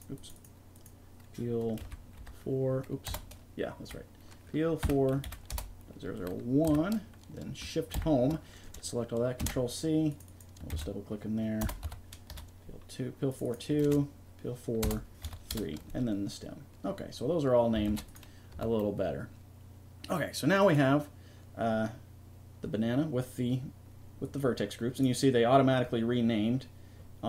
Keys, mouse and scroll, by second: 10.3-13.1 drag, 13.3-15.4 drag, 17.9 ctrl+s, 18.5 a.